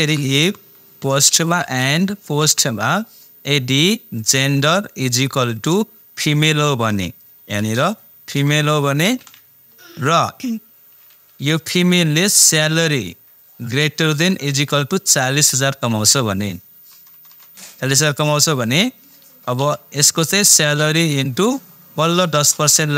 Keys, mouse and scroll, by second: 0.0-2.4 typing, 4.2 click, 5.2 =, 7.6 shift+', 8.3 shift+f, 9.1 shift+', 11.6 ,, 12.9 click, 14.1 shift+., 14.5 =, 18.3 =, 18.6 shift+0, 19.6 ,, 20.5 click.